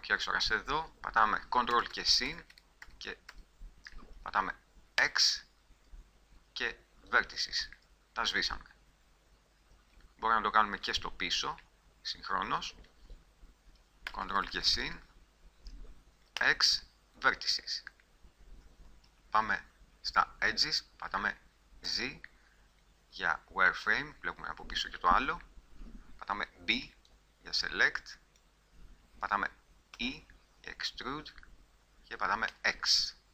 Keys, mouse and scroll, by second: 1.9-2.7 ctrl+KP_Add, 3.0 ctrl+KP_Add, 3.5 ctrl+KP_Add, 5.2 x, 11.0-14.2 right drag, 14.2-15.1 ctrl+KP_Add, 16.6 x, 19.6 right click, 22.0 z, 25.4 KP_1, 26.6 b, 30.1 e.